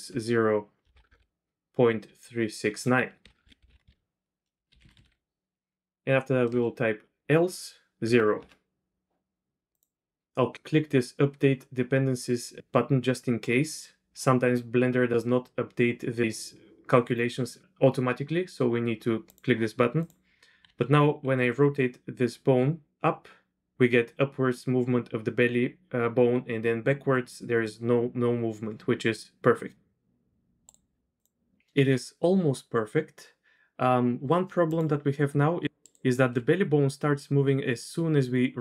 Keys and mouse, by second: 1.0 BackSpace, 3.3 BackSpace, 3.7 BackSpace, 9.7 click, 19.2-19.6 drag, 20.0 drag, 20.2-21.2 typing, 23.6 typing, 24.8 typing, 26.2-27.0 typing, 29.9-30.3 typing, 34.7 click, 34.9-36.6 typing.